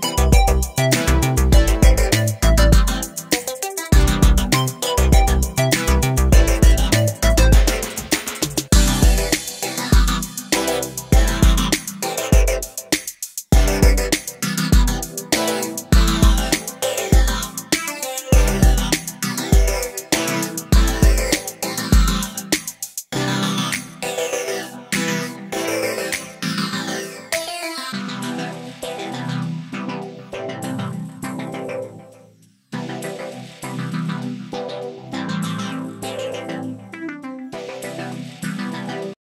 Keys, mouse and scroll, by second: 0.0-1.0 middle drag, 1.0 shift+click, 1.3-1.7 scroll down 3, 1.7 shift+middle click, 2.1 /, 2.3 middle click, 3.0 /, 3.6 shift+middle click, 4.4 i, 6.6 middle click, 6.9 scroll up 1, 7.1-8.5 shift+middle drag, 8.5 Tab, 8.6 click, 9.5 Tab, 9.7 middle click, 9.9 Tab, 10.1 click, 10.2 Tab, 10.6-11.2 scroll up 1, 11.3 ctrl+r, 13.8 ctrl+r, 15.7 middle click, 16.4 click, 16.9 3, 17.0 click, 17.4-19.1 middle drag, 19.1 e, 21.1 click, 21.6 Tab, 21.7 scroll down 2, 21.8-22.3 middle drag, 22.3 scroll up 4, 22.5-25.3 middle drag, 25.3 Tab, 26.5 ctrl+r, 28.2-29.4 middle drag, 29.5-30.5 middle drag, 30.5 ctrl+r, 33.0 ctrl+r, 34.5 scroll up 1, 34.6 middle click, 35.4 3, 35.4 click, 36.0 e, 36.9 scroll down 2, 37.0 middle click, 37.4 scroll up 2, 37.6-38.6 shift+middle drag, 38.6 ctrl+r.